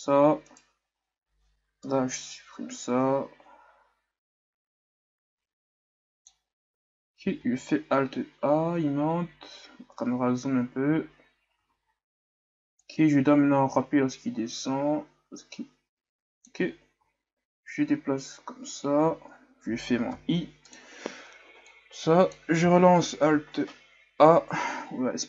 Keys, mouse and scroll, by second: 0.4 right click, 1.9 Delete, 2.9-5.9 drag, 7.6 alt+a, 12.1 alt+a, 12.9-16.6 drag, 17.5-18.5 scroll down 1, 18.5-20.8 scroll down 1, 20.8-21.2 scroll down 1, 21.8-22.7 drag, 22.7 alt+a.